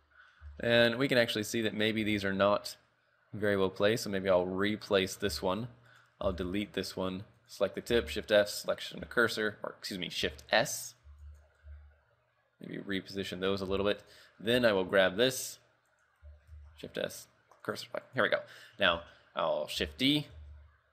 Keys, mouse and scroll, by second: 0.1-0.5 scroll up 6, 0.6 shift+middle click, 0.9-1.8 scroll up 2, 2.0 g, 5.2 scroll down 6, 5.5 shift+middle click, 6.0 right click, 6.3 x, 7.1 right click, 7.5 right click, 8.0 shift+s, 9.2 shift+middle click, 10.2-10.5 scroll up 2, 10.5 shift+middle click, 10.7 scroll up 2, 11.1 b, 11.7 g, 13.5 scroll down 4, 13.8 a, 14.1 right click, 14.4-14.8 scroll down 2, 14.8 shift+middle click, 15.0-15.4 scroll up 3, 16.0 right click, 16.6 shift+s, 18.1 right click, 18.6 scroll down 5, 19.8 shift+d, 20.4 shift+s.